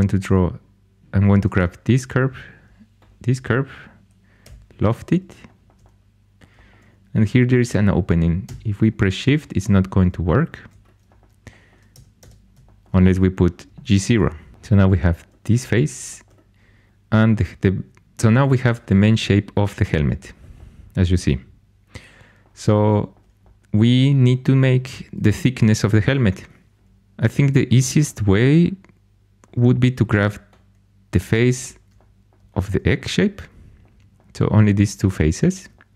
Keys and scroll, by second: 4.4 i, 11.9 Tab.